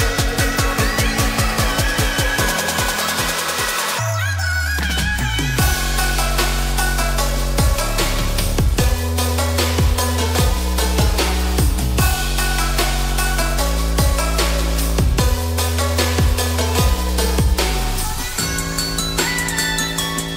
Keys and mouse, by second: 0.1 2, 1.9 click, 2.6-3.6 middle drag, 4.2 ctrl+b, 11.4-13.2 middle drag, 14.7-19.4 middle drag.